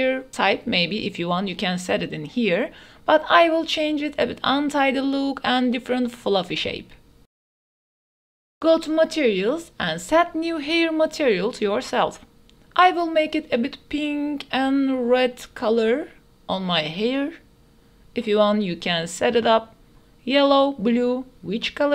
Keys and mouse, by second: 8.3 ctrl+s, 8.5-10.0 drag, 11.7 click, 12.2-14.5 drag.